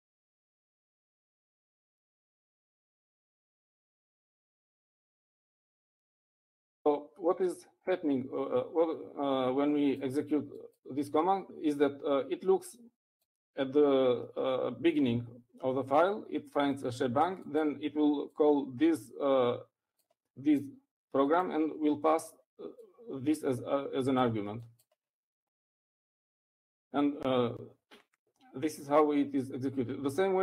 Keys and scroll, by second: 5.0-6.4 typing.